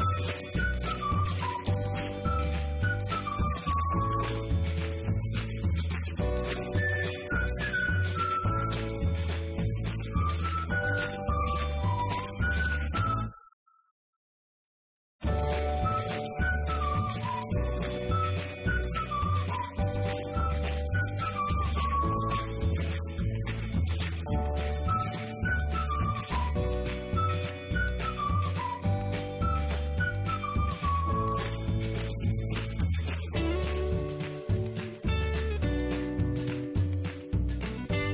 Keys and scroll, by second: 0.0-3.1 typing.